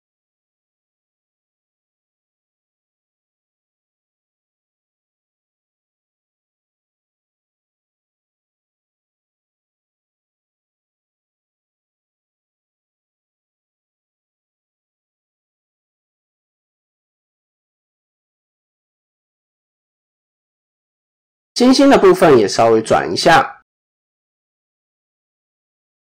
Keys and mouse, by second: 1.1-2.2 drag, 2.9 KP_7, 3.3 shift+middle click, 4.1 shift+middle click, 4.5 click, 5.3 ctrl+r, 6.3 click, 7.6 KP_3, 9.3-11.0 drag, 11.5 KP_7, 13.3-14.5 drag, 15.6 click, 17.0 click, 17.3 shift+middle click, 18.6 click, 19.7 shift+middle click, 20.6 shift+middle click, 22.2 r, 25.6-26.0 drag.